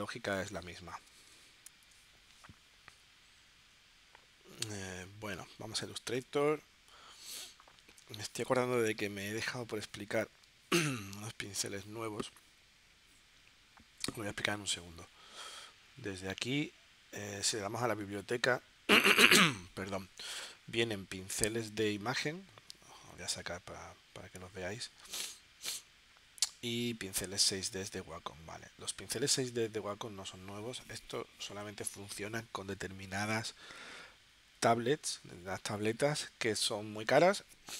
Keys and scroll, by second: 0.4 space, 8.0 space, 10.5 space, 11.5 space.